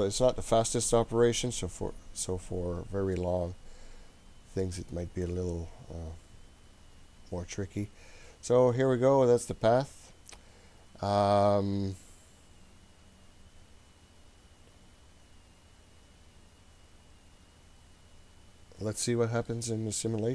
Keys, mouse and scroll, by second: 2.5 scroll up 2, 3.1-19.5 middle drag.